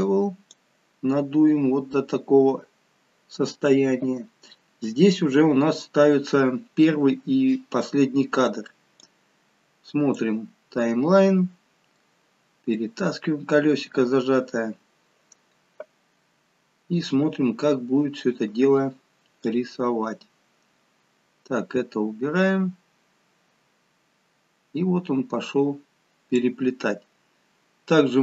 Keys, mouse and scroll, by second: 0.9-4.1 scroll up 4, 4.1-5.6 scroll down 2, 8.9 click, 11.8 middle click, 17.2-19.3 scroll down 2, 19.3 click, 27.5-28.2 scroll up 2.